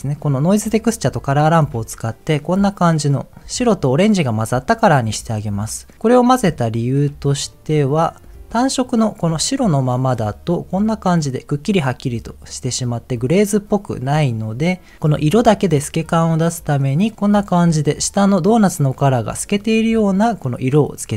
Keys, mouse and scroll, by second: 1.2 ctrl+shift+click, 6.7 ctrl+shift+click, 7.5 middle click, 9.2 click, 11.3 scroll down 2, 11.7-14.3 middle drag, 15.8 click, 17.1 scroll up 2, 17.2-19.0 middle drag.